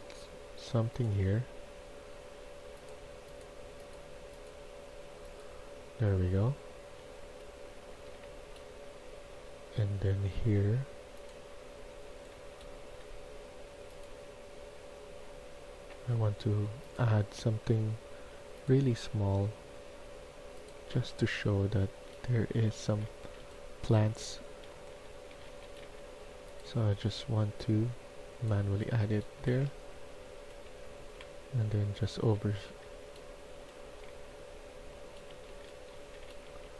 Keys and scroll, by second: 7.9-8.6 typing, 11.9 d, 12.7 d, 20.6-26.2 typing, 24.1 Escape, 28.5 a, 29.0 a, 29.3 a, 29.3 a, 29.9 Escape, 30.1 Escape, 30.9-36.7 typing.